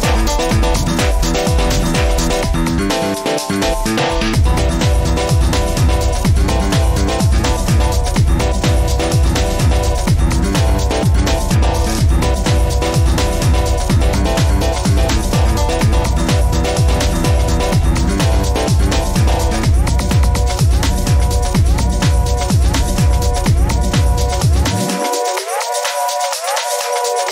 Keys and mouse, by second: 0.6 ctrl+z, 1.1 Tab, 2.6 ctrl+r, 8.5 middle click, 10.3 ctrl+z, 10.6 ctrl+z, 11.8 middle click, 12.2 middle click, 12.5 Tab, 17.4 middle click, 17.7 middle click, 21.4 ctrl+r.